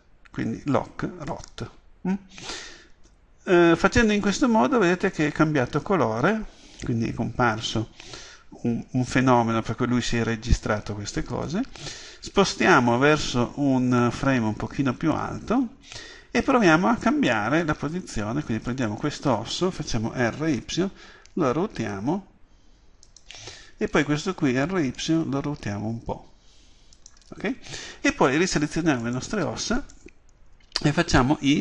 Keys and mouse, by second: 18.8 right click, 20.3 r, 23.3-25.6 drag, 24.0 right click, 24.7 r, 27.2-29.0 drag, 29.1-31.6 right drag.